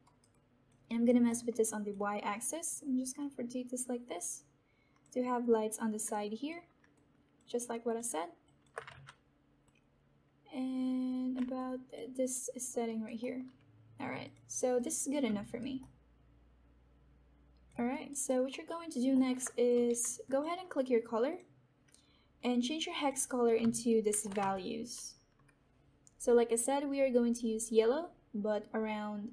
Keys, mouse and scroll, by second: 0.5 alt+click, 0.8 alt+right click, 1.2 alt+middle click, 1.6-8.0 alt+drag, 2.9-5.0 drag, 8.4 alt+click, 8.9 ctrl+z, 9.9-11.5 drag, 11.5-13.1 alt+drag, 13.5 alt+middle click, 14.2 click, 15.3 alt+right click, 16.0-17.6 alt+drag, 17.8 alt+right click, 18.2 alt+middle click, 18.6 alt+right click, 19.0 alt+middle click, 19.6 w, 20.1 alt+click, 24.0 ctrl+v.